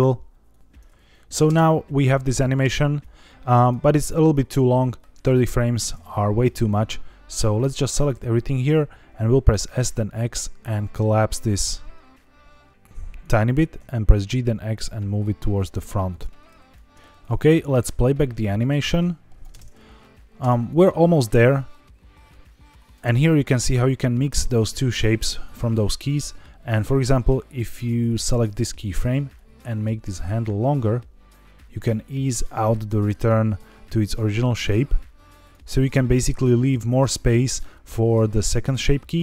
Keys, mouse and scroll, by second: 0.4 click, 1.4 space, 2.5 space, 2.9-3.6 drag, 4.2 scroll down 1, 6.3-8.0 drag, 9.1 s, 9.5 x, 13.1 click, 13.4 g, 13.7 x, 16.0 click, 16.6 click, 17.1 click, 17.7-19.3 drag, 19.5 space, 20.3 space, 20.6-22.9 drag, 23.5 click, 28.0 click, 29.3 click, 29.4 click, 34.6-35.4 drag, 38.7-39.2 drag.